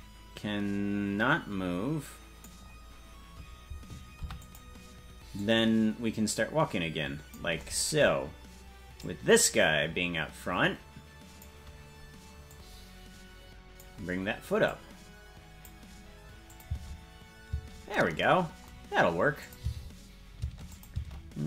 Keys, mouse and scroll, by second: 4.1 i, 5.4-7.4 drag, 8.9-11.4 drag, 12.5-13.8 drag, 14.6-15.7 drag, 16.4-17.6 drag, 16.6 space, 17.6 space, 19.4 click, 19.6 space, 20.7 click, 20.7 space.